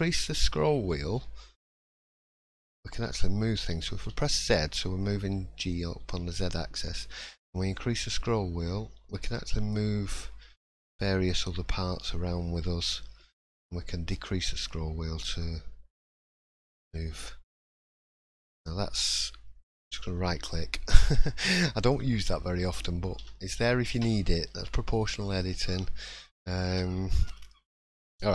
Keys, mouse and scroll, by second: 19.3 middle click, 19.8 shift+middle click, 20.9 click, 21.5 middle click, 23.2 o, 23.9 middle click, 24.7 shift+middle click, 25.2 scroll down 1, 25.5 scroll up 2, 25.8 middle click, 26.7 3, 26.9-27.5 scroll down 1, 27.5 middle click, 27.5 scroll down 3.